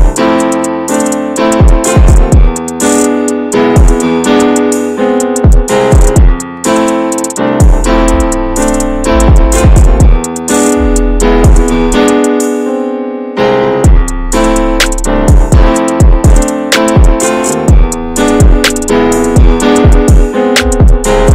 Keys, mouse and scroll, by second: 1.9 x, 2.2 scroll down 2, 2.5 middle click, 3.3 Tab, 3.8 /, 4.5 shift+middle click, 4.6-4.9 shift+scroll up 1, 4.9-6.0 middle drag, 6.0 click, 6.4-7.1 scroll up 3, 6.7 click, 7.3 middle click, 7.4 Tab, 8.0 Tab, 8.3 click, 8.9 /, 9.8 click, 10.2 middle click, 10.4 scroll up 1, 10.5 Tab, 10.7 middle click, 11.2-11.7 scroll up 1, 12.7 middle click, 13.6 alt+z, 13.8 middle click, 14.6 alt+z, 14.7-15.2 scroll up 1, 15.2 shift+middle click, 15.3-15.7 scroll up 1, 15.7 x, 15.9-16.3 scroll down 5, 16.3 middle click, 17.2 Tab, 17.6 drag, 17.9 scroll up 2, 18.3-19.2 middle drag, 19.2 drag, 19.6 /, 20.6 scroll down 3, 20.9-21.2 middle drag, 21.2 click.